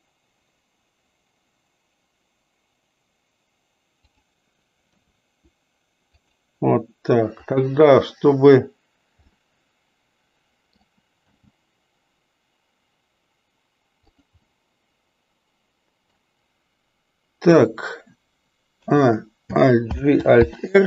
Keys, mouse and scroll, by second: 4.9 r, 7.3 click, 9.3-10.9 middle drag, 11.3 g, 14.5-16.4 middle drag, 18.8 a, 19.8 alt+g, 20.4 alt+r.